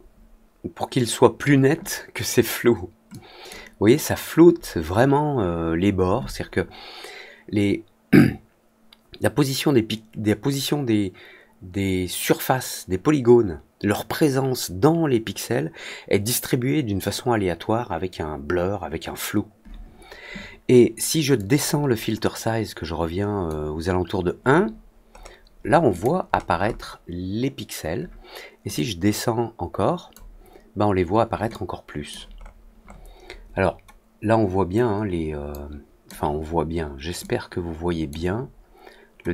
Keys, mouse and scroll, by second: 3.0 click, 21.3-23.4 drag, 25.1 middle click, 25.8 click, 26.2 middle click, 26.5 middle click, 28.7-30.0 drag, 31.4 click, 32.3 middle click, 32.7 middle click, 35.4-36.0 drag, 37.1 click.